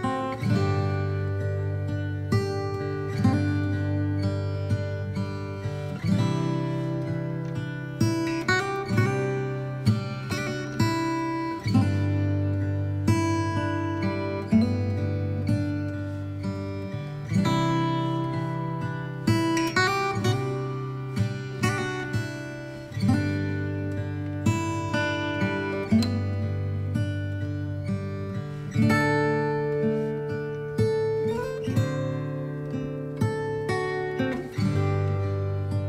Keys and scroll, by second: 10.0-11.4 typing, 10.8 Return, 16.5 ctrl+z, 16.7 ctrl+x.